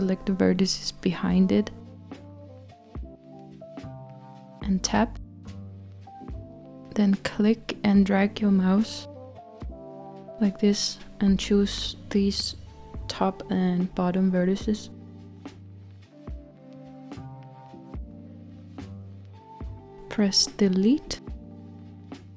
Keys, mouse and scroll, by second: 3.8 Tab, 9.3 click, 13.2 shift+click, 21.9 Delete.